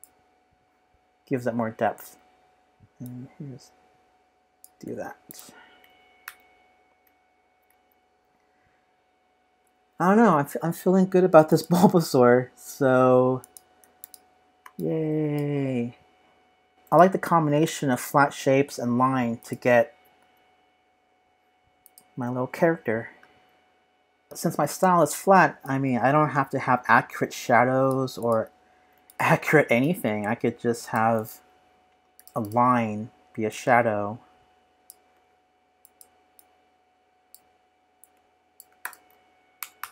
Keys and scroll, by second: 6.2 super+-, 7.0 super+=, 17.6 super+-, 34.7 z.